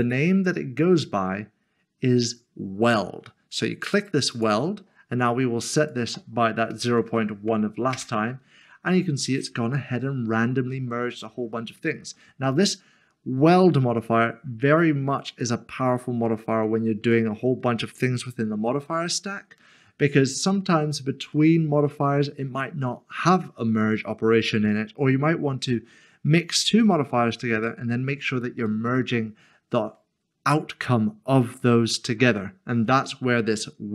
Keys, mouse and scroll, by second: 0.0 click, 4.3 click, 6.8-7.1 typing, 7.9 Return, 9.3 middle click, 12.2 scroll down 1, 16.3 middle click, 21.3 middle click, 28.7 middle click.